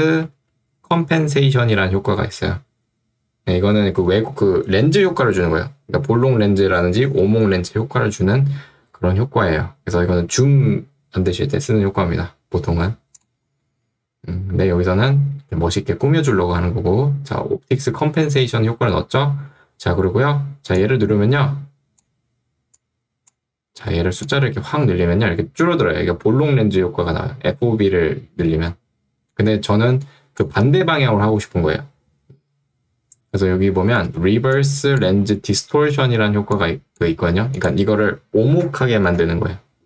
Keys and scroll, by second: 0.0-1.0 typing, 34.1 ctrl+2.